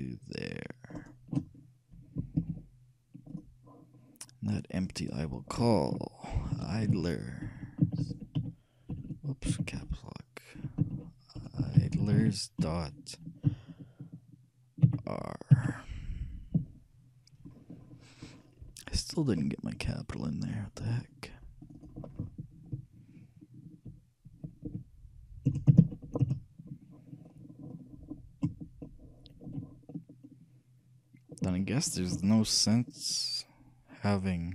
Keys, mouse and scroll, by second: 1.2-2.8 right drag, 2.6 ctrl+p, 5.0-7.1 drag, 7.8 BackSpace, 9.2 BackSpace, 19.3-23.9 drag, 28.2-29.2 scroll up 1, 29.2-34.2 shift+middle drag.